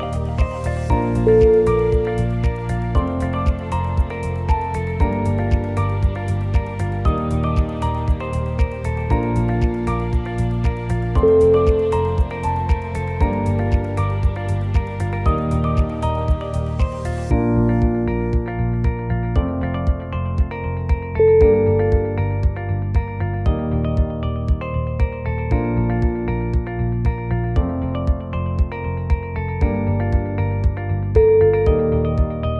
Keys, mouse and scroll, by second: 0.9 click, 1.7 shift+click, 3.2 o, 3.2 g, 7.7 alt+click, 8.3 scroll down 2, 8.5 middle click, 9.3 scroll up 2, 9.7 shift+click, 11.3 middle click, 11.9 shift+middle click, 12.4 g, 14.3 middle click, 14.8-15.2 scroll down 2, 15.2 g, 17.6 middle click, 17.6 scroll down 4, 17.7 KP_1, 18.7 click, 19.0 shift+middle click, 19.5-19.9 scroll up 2, 20.2 shift+middle click, 22.2 1, 24.4 click, 25.5 e, 26.9 g, 28.7 e, 29.4 g, 30.6 e, 31.9 g.